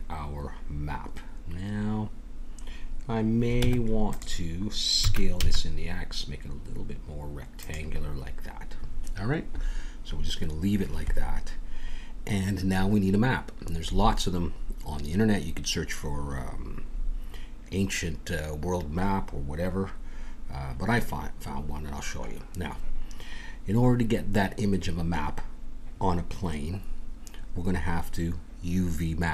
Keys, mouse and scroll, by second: 0.7-2.2 scroll up 1, 2.2-3.5 scroll up 1, 3.5 Tab, 5.0 s.